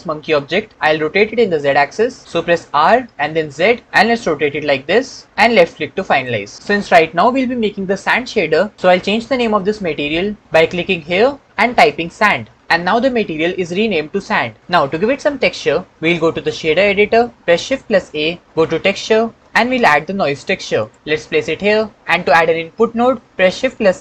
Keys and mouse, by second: 2.8 r, 3.5 z, 6.0 click, 10.9 click, 11.5 shift+middle click, 11.8 click, 17.8 shift+a, 23.4 shift+a.